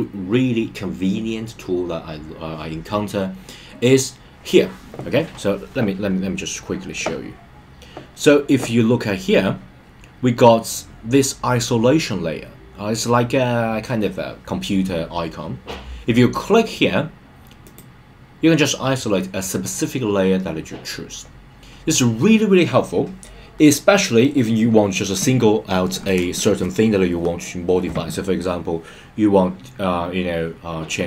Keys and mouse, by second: 17.6 click.